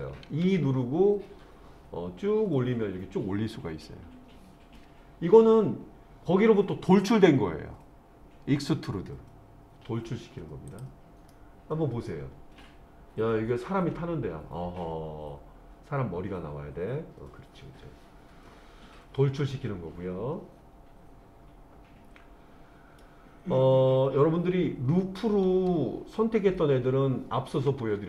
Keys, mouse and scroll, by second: 0.5 e, 10.7 click, 11.3-23.0 middle drag.